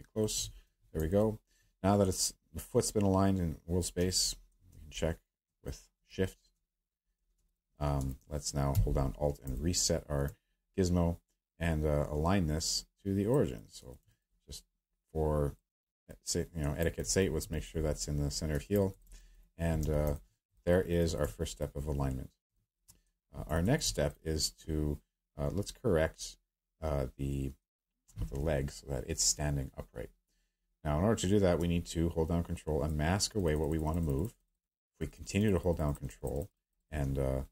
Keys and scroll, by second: 0.6 w, 19.8 q.